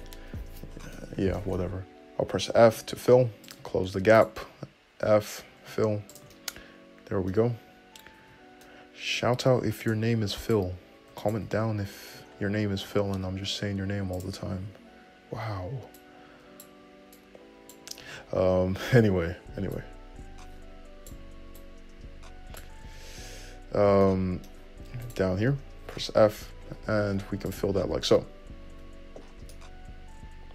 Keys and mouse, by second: 2.5 f, 4.4 click, 4.5-7.7 middle drag, 5.3 f, 7.6 `, 8.0 middle click, 8.5-10.1 middle drag, 8.5 `, 10.1 click, 10.7 middle click, 11.4 shift+click, 11.5-16.2 middle drag, 11.7 `, 13.1 g, 14.5 `, 16.2-21.2 right drag, 18.3 `, 19.1 `, 21.2-25.3 shift+drag, 23.1 `, 25.3-26.4 middle drag, 26.1 f, 26.4-30.5 shift+drag, 28.2 `, 28.9 `.